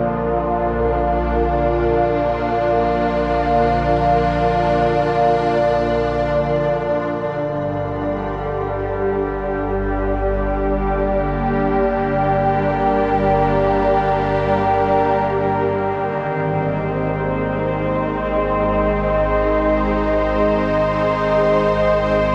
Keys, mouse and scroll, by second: 5.8 Down, 7.2 Up, 8.4 click, 15.8-16.4 typing, 16.4 click, 18.8-22.3 drag.